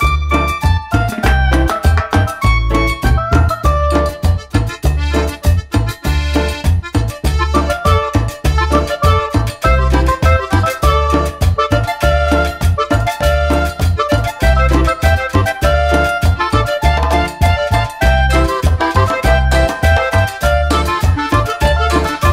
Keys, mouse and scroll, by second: 0.2 middle click, 0.7 middle click, 1.2 click, 1.5 click, 2.3 click, 4.0 click, 4.4 middle click, 4.9 middle click, 5.0 scroll down 1, 6.5 click, 10.1 click, 10.6 click, 12.1 click, 12.7 click, 13.3 click, 14.7 click, 16.1 click, 16.9 click, 18.1 click, 19.4 click, 21.0 click, 22.0 click.